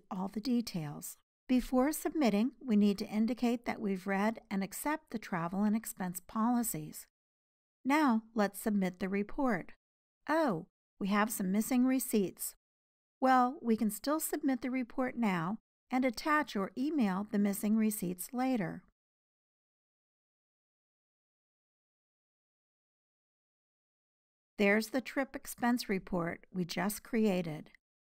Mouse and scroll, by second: 0.2 click, 0.5-1.4 scroll down 4, 1.4-6.8 drag, 6.8 scroll down 4, 7.2 click, 7.4 click, 7.6-12.8 drag, 24.2 scroll down 2, 24.4 click, 27.8 scroll down 2.